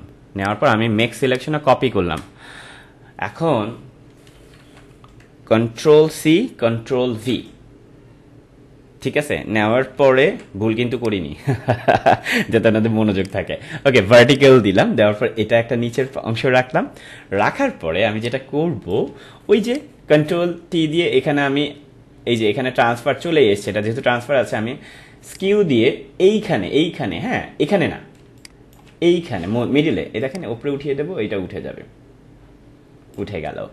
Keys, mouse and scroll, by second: 0.4 right click, 1.3 click, 4.1 click, 4.3 ctrl+-, 6.1 ctrl+c, 9.9 ctrl+v, 10.9 right click, 17.5 ctrl+=, 18.0 space, 18.2 click, 18.5 space, 19.6 right click, 25.3 click, 28.1 space, 28.3 click, 28.7 space, 30.2-33.7 drag.